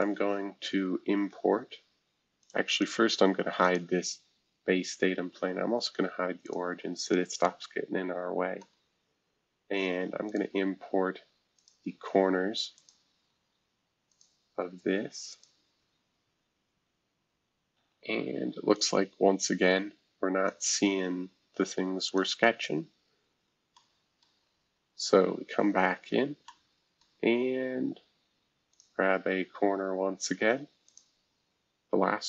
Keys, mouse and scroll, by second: 0.0-0.9 scroll down 1, 0.9-1.5 scroll down 1, 2.4 click, 2.7 click, 5.7 scroll up 1, 8.6-10.2 middle drag, 8.9 scroll up 2, 10.2-16.1 drag, 16.1 scroll down 2, 16.7 scroll down 2, 17.2 scroll up 2, 17.7 Escape, 18.7-21.5 drag, 21.5 right click, 22.0 click, 23.2 scroll up 2, 23.7-25.2 middle drag, 24.4 scroll down 1, 25.2 scroll down 1, 25.6-26.1 scroll up 4, 26.4-28.5 middle drag, 28.7-30.3 drag, 30.9-31.9 drag, 31.9 Escape.